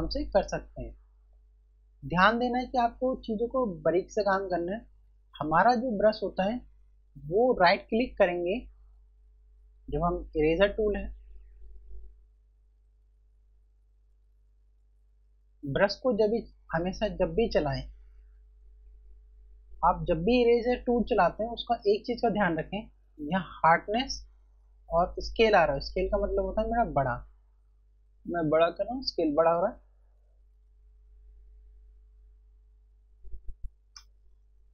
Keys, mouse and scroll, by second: 8.5 right click, 22.6 right click, 25.1 click, 33.7 0.